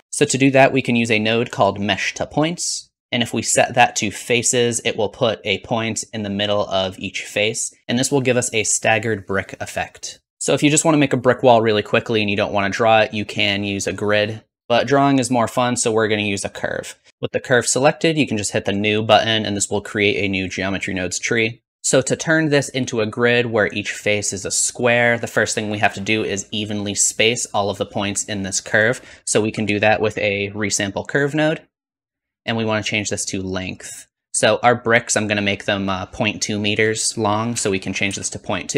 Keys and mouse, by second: 9.2-14.6 middle drag, 18.6-21.7 drag, 28.8 click, 29.1 shift+a, 32.6-34.8 drag, 32.6-34.8 middle drag, 32.6-34.8 right drag.